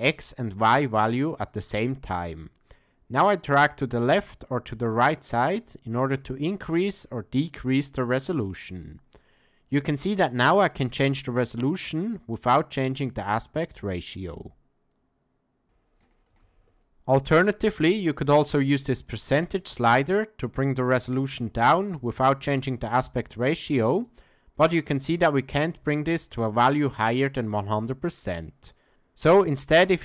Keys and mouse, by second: 14.2-15.6 drag, 16.3 ctrl+z, 19.6 click, 21.3 click, 23.2 click, 25.6-27.1 drag.